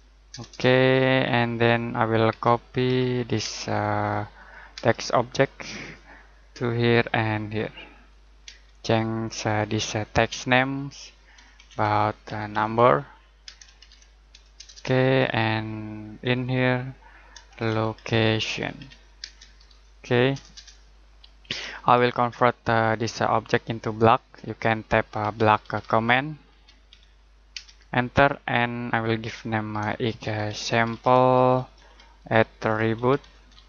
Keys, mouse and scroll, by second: 0.3 Return, 1.3-1.7 scroll down 1, 1.7 middle click, 2.3-3.4 typing, 3.9 click, 4.7 space, 5.7 click, 8.4 space, 9.2 click, 11.3-13.4 typing, 14.5 Return, 16.2 click, 17.2-19.3 typing, 20.3 Return, 21.3-22.2 scroll down 1, 22.2 middle click, 23.4-23.8 scroll up 1, 23.8 middle click, 24.0-24.5 scroll down 1, 24.5 middle click, 24.9-27.5 typing, 29.8-33.6 typing.